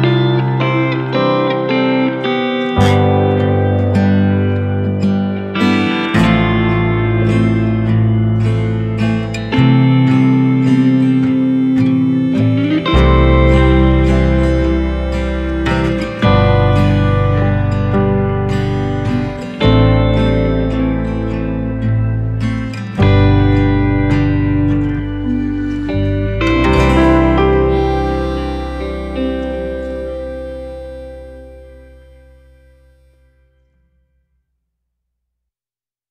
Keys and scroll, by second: 4.2 ctrl+shift+g, 9.9 alt+space, 10.6 alt+space.